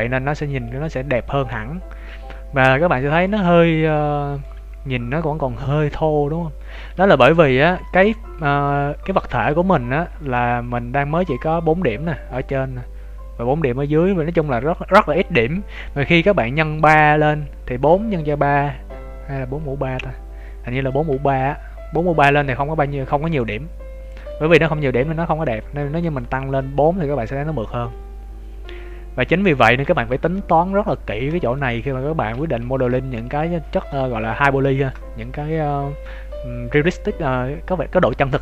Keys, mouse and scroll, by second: 0.0 scroll up 2, 0.3 Tab, 0.6 Tab, 0.9 scroll down 2, 6.9 Tab, 21.0 Tab, 25.4 scroll up 3, 29.8 Tab, 32.5-32.9 scroll down 3, 32.5 t, 32.9 shift+middle click, 33.4 middle click, 34.3 Tab, 34.7 shift+middle click.